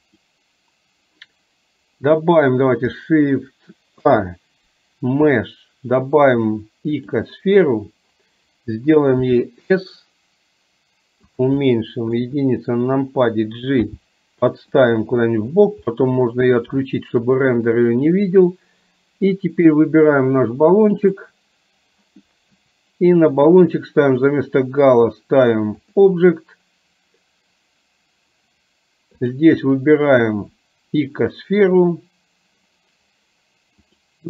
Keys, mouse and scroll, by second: 0.0 click, 4.0 shift+a, 9.3 s, 11.8-12.1 middle drag, 13.9 g, 15.9-16.4 middle drag, 16.9-17.3 shift+middle drag, 21.1 click, 24.1-26.0 drag, 29.4-34.0 drag.